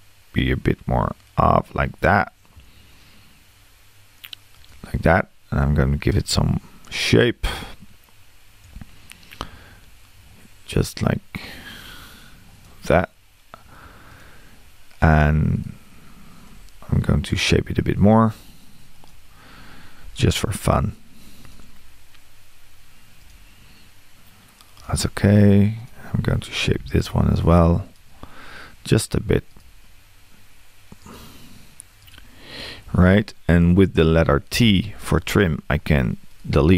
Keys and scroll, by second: 34.6 t.